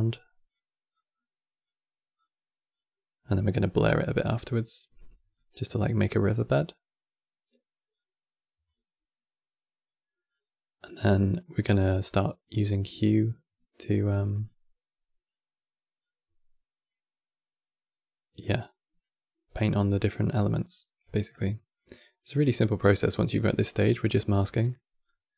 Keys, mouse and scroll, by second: 14.1-23.6 drag, 23.6-25.1 middle drag, 25.1-25.3 drag.